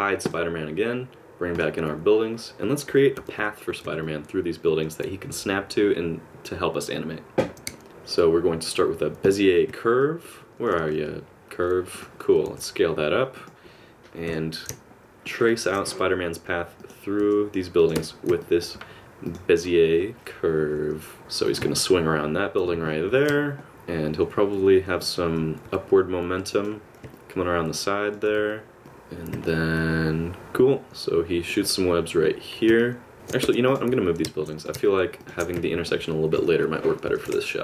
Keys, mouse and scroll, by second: 0.3 click, 3.2 a, 3.4 KP_Decimal, 4.0 middle click, 7.9 shift+a, 10.0 middle click, 10.8 g, 12.5 s, 14.3 KP_7, 15.5 shift+middle click, 15.9 r, 17.2 g, 18.0 Tab, 18.4 middle click, 19.3 click, 20.6 KP_1, 21.2 g, 21.8 middle click, 23.1 KP_Add, 23.7 shift+middle click, 23.7 click, 25.7 r, 27.2 middle click, 28.4 r, 28.8 g, 29.5 middle click, 32.8 middle click, 33.2 Tab, 33.3 click, 33.7 click, 33.8 shift+click, 34.2-36.9 typing, 35.1 right click, 35.3 middle click, 35.8 middle click, 36.5 click, 36.6 shift+click, 37.4 middle click.